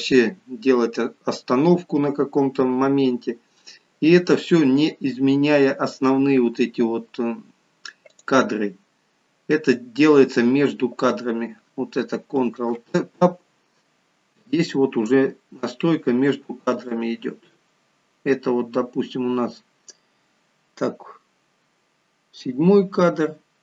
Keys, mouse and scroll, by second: 8.2 click, 12.7 ctrl+Tab, 14.0 scroll up 6, 14.7 scroll up 1, 17.1 click.